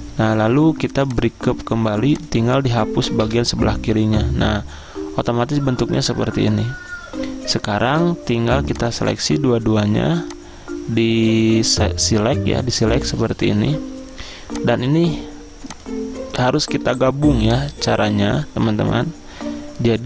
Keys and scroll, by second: 3.3 Delete.